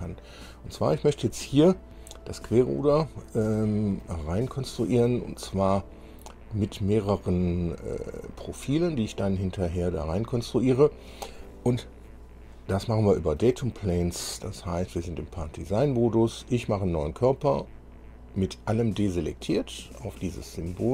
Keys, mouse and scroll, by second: 0.9 scroll up 2, 3.0-4.3 drag, 12.8 click, 17.7 click, 20.6 click.